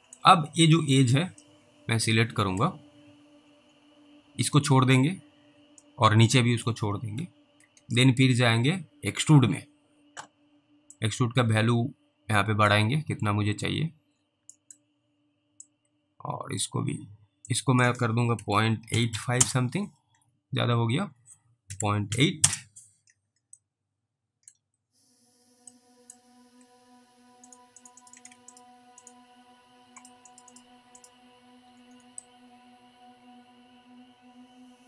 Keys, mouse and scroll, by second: 0.9 click, 1.7 alt+middle click, 3.7-4.2 scroll up 1, 6.1 middle click, 9.3 click, 11.2 click, 13.0-14.2 scroll up 2, 14.2 scroll down 1, 14.8 middle click, 15.9 click, 17.8 click, 18.4-19.6 typing, 21.7-22.1 typing, 22.4 Return, 23.9 alt+middle click, 26.0 middle click, 27.5 click, 27.8 double click, 28.0 click, 28.2 double click, 30.4 double click, 30.5 double click, 31.0 ctrl+double click, 32.5 alt+middle click.